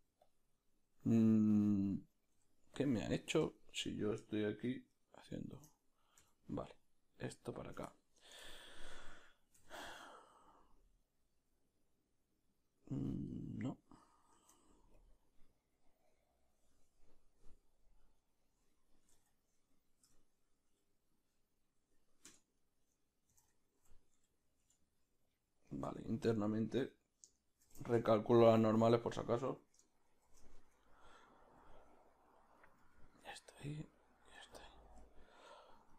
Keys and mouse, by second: 2.8 x, 3.2-5.6 right drag, 5.6 shift+d, 7.7 shift+d, 7.9-15.1 shift+middle drag, 9.6 s, 15.1 ctrl+a, 18.2 right click, 19.1 s, 22.6 right click, 23.3 s, 26.0 Tab, 26.8 a, 27.7 shift+n, 28.1 Tab, 28.5 right click, 28.9 Tab, 29.5 a, 30.3 shift+n, 30.8 Tab, 31.6 g, 32.6 right click, 32.8 g, 35.0-35.9 middle drag.